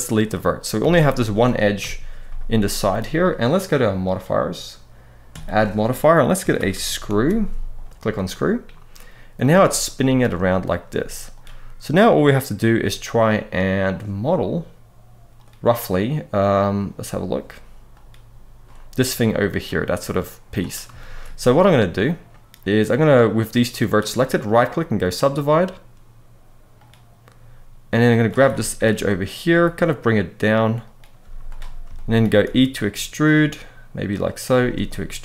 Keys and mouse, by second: 0.5 a, 1.5 KP_1, 5.2-8.0 drag, 9.1 z, 10.6 z, 20.7 shift+middle click, 23.4 click, 24.3-26.6 right drag, 27.8 click, 28.2 shift+middle click, 29.2 g, 30.6 click, 30.9 z, 31.7 shift+middle click, 32.2 e, 34.0 click, 34.3 e, 35.0 click.